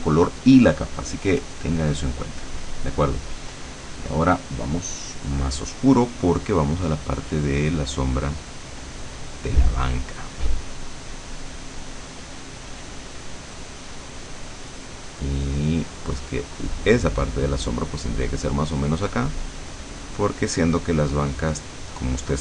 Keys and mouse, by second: 1.1 click, 2.3 click, 4.1 click, 7.1-18.0 drag, 18.6-22.4 drag.